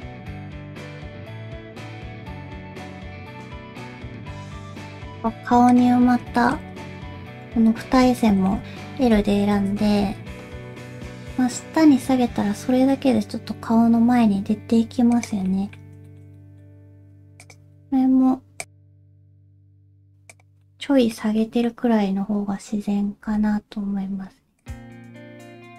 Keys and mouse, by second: 0.2 middle click, 0.5 g, 0.9 r, 1.4 middle click, 1.9 middle click, 2.1 r, 3.3 middle click, 4.8 Tab, 5.2 alt+z, 5.7 click, 6.4 shift+middle click, 6.8 alt+a, 7.9 l, 8.2 middle click, 8.6 ctrl+z, 9.2 l, 9.8 alt+z, 10.5 g, 15.5 middle click, 16.1 shift+middle click, 16.4 middle click, 17.0 r, 17.6 g, 18.7 middle click, 19.1 middle click, 19.3 g, 20.6 middle click, 21.4 middle click, 23.2 g.